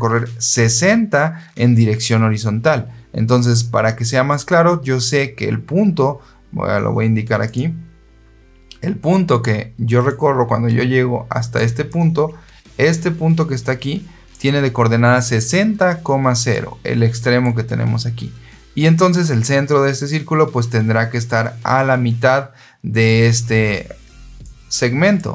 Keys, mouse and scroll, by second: 7.3 click, 10.0-11.5 drag, 11.8-14.2 drag, 16.4 click, 24.3 click.